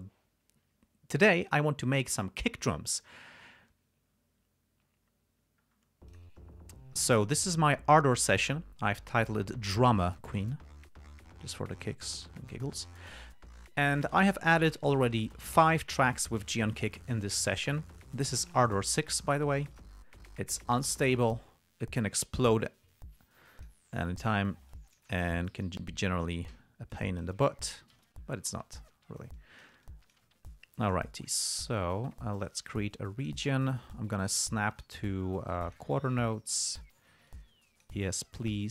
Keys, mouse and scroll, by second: 6.0 scroll up 2, 6.5 click, 7.8 click, 14.3 click, 19.5 click, 20.1 click, 21.2 click, 24.0 click, 25.1 click, 25.6 ctrl+scroll up 2, 26.5 ctrl+scroll up 2, 26.9 ctrl+d, 27.3 ctrl+click, 28.1 g, 28.4 ctrl+scroll down 2, 29.2 ctrl+scroll down 2, 29.7 ctrl+click, 30.2 click, 30.8 ctrl+scroll up 2, 31.2 ctrl+click, 32.0-33.8 drag, 34.3-36.3 drag, 36.8 click, 37.6 click.